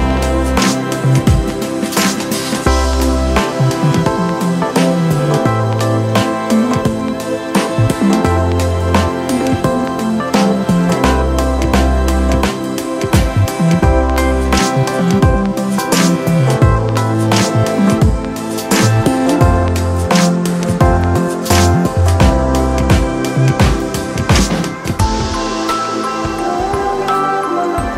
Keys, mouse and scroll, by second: 0.1 ctrl+=.